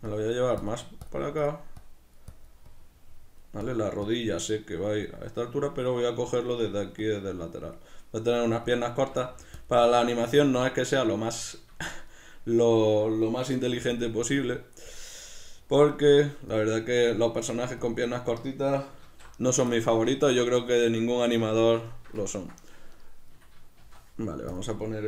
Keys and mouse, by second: 9.7 click, 11.3-14.0 middle drag, 14.0 click, 15.2-16.5 middle drag, 16.5 click, 17.2 middle click, 17.8 click, 19.0 q, 19.7-22.9 shift+middle drag, 21.4 b, 21.5 Tab, 22.9 right click, 23.8 shift+d, 24.6 click.